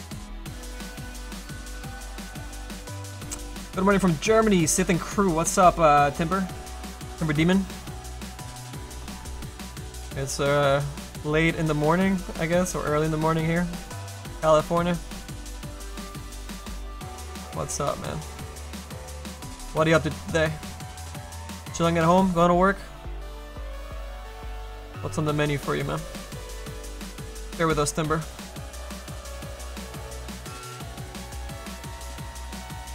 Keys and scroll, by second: 27.9 s, 28.5 s.